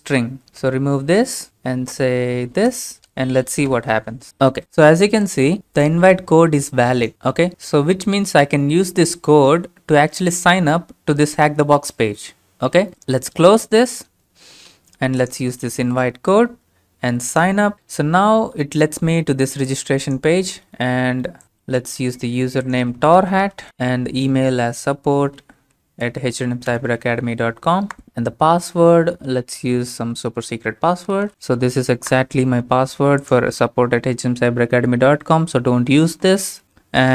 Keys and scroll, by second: 0.7-1.5 typing, 2.7 ctrl+v, 3.8 Return, 15.9 ctrl+v, 23.7-25.0 typing, 26.0 Down, 26.9 Return, 30.9-32.2 typing.